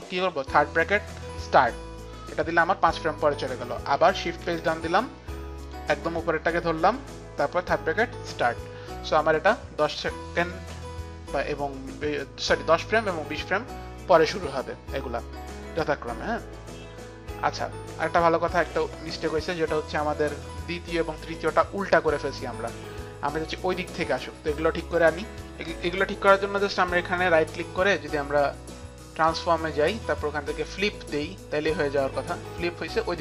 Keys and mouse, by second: 4.5 shift+Page_Down, 5.7 click, 8.0 shift+Page_Down, 8.0 click, 8.7 click, 10.4 click, 23.0 click, 25.4 click, 26.8 right click, 29.3 right click, 31.8 click.